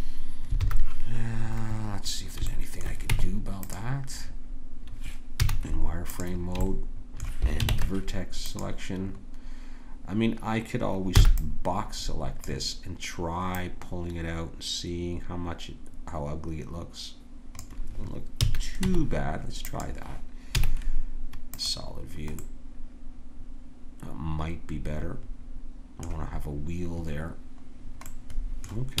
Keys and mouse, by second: 0.6 ctrl+KP_1, 3.1 Tab, 4.3-5.5 middle drag, 5.4 z, 7.7 ctrl+Tab, 11.2 b, 13.5-14.6 drag, 14.7 click, 18.4 a, 18.8 Tab, 20.5 z, 27.7-29.0 middle drag.